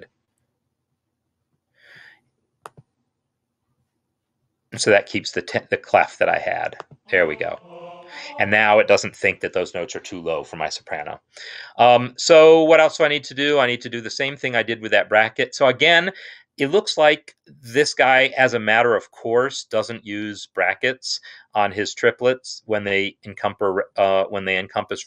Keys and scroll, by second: 0.9-1.7 typing, 7.5 Right, 8.1 Right.